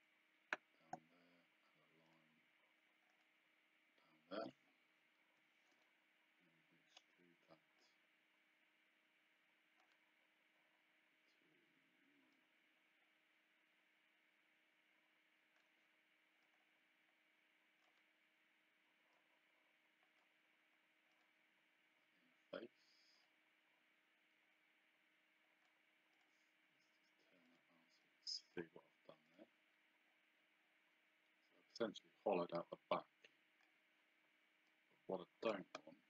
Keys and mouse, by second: 2.1 click, 5.3 Escape, 6.9 click, 12.3 click, 16.4 click, 19.1 click, 21.1 click, 23.2 click, 24.5 click, 26.2 click, 27.5 click, 29.3 click, 31.7 click, 34.7 click.